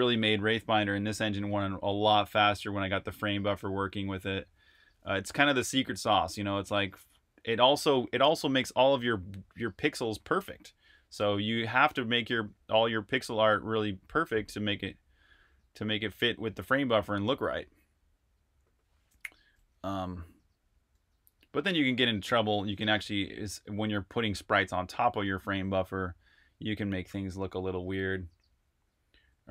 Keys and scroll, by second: 22.4 super+r, 22.6-23.5 typing, 28.9-29.5 typing.